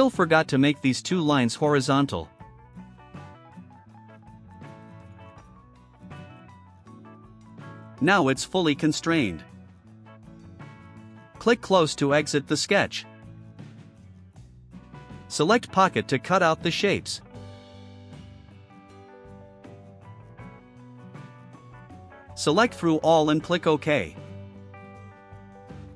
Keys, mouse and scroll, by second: 1.3 middle click, 1.3 scroll up 1, 2.1 click, 3.4 click, 4.9 click, 6.7 click, 8.4 scroll down 2, 9.1 right click, 13.0 click, 14.7 click, 15.3 right click, 15.9 middle drag, 15.9 scroll down 1, 16.2 right click, 16.6 click, 17.5 click, 20.8 click, 22.2 click, 22.8 click, 25.4 click.